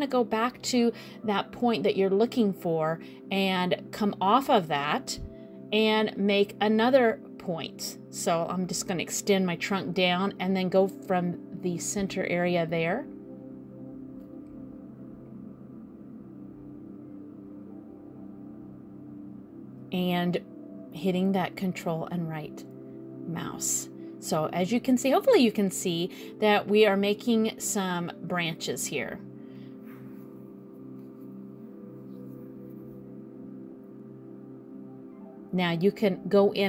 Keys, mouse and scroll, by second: 2.1 click, 5.7 click, 6.6 click, 8.4 scroll down 2, 8.6 middle click, 9.6 click, 11.2 shift+right click, 14.8 click, 15.8 shift+right click, 17.3 click, 18.6 ctrl+right click, 19.5 ctrl+right click, 20.3 ctrl+right click, 21.3 ctrl+right click, 22.1 middle click, 23.8 click, 24.9 ctrl+right click, 25.6 ctrl+right click, 26.6 ctrl+right click, 27.3 ctrl+right click, 27.8 middle click, 29.6 click, 30.5 ctrl+right click, 31.3 ctrl+right click, 31.9 ctrl+right click, 32.5 middle click, 35.6 click.